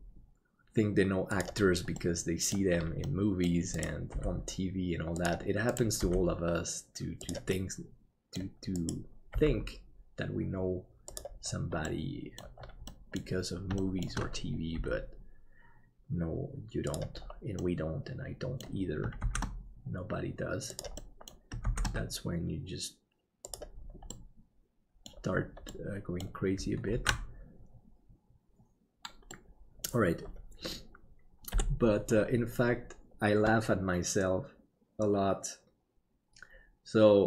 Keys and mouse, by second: 2.0 middle click, 3.2 middle click, 4.1 g, 6.0 g, 7.6 middle click, 9.3 g, 12.0 middle click, 13.0 middle click, 13.9 shift+middle click, 14.7 g, 17.7 middle click, 19.2 shift+d, 21.1 middle click, 24.2 middle click, 25.8 middle click, 27.1 ctrl+s, 29.4 middle click, 31.5 KP_7.